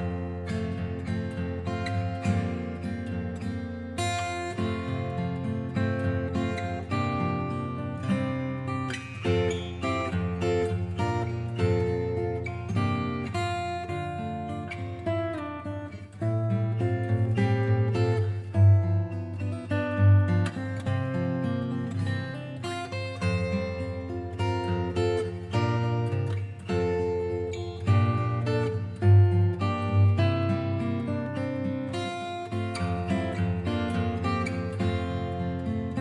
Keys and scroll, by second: 11.4 scroll down 1, 16.9 scroll up 1.